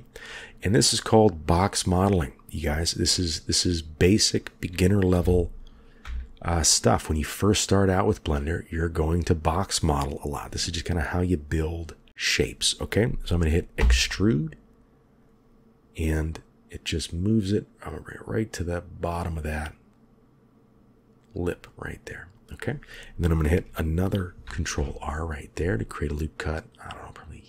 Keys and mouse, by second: 0.8 click, 5.1 g, 8.9 click, 13.7 e, 24.3 ctrl+r.